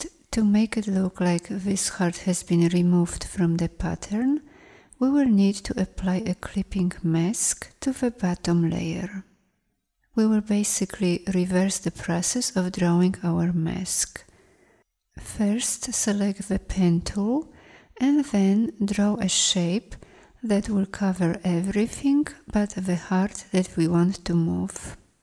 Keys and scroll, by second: 16.1 p.